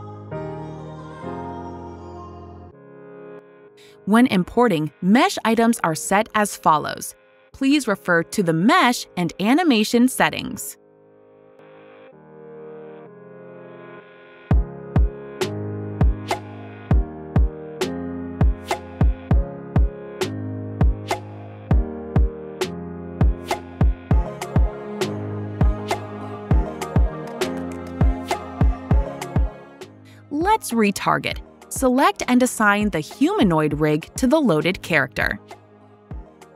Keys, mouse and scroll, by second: 1.2 right click, 3.2 click, 5.2 click, 7.1 click, 8.4 click, 9.4 click, 12.5 click, 13.6 click, 14.4 click, 15.3 click, 16.0 click, 17.3 click, 20.6 click, 21.6 click, 23.2 click, 29.3 click, 29.5 click, 29.6 click, 30.9 click, 34.5 click.